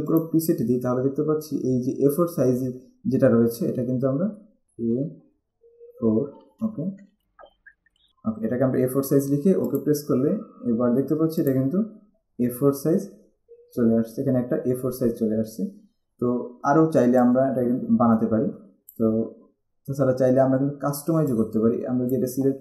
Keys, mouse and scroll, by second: 0.3 click, 4.6 shift+a, 6.1 4, 7.4-8.6 typing, 9.9 click, 11.6 click, 17.3 click, 21.5 click.